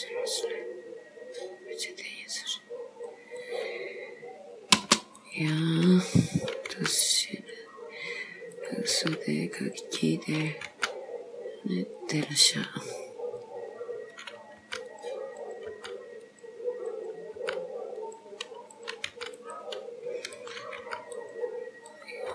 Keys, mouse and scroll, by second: 5.2 click, 6.4 click, 6.8 g, 8.6 click, 8.9 g, 10.4 click, 10.7 g, 14.2 click, 14.7 g, 15.5 click, 15.8 g, 17.0 click, 17.5 g, 18.9 click, 19.3 g, 20.4 click, 20.9 g, 22.0 click.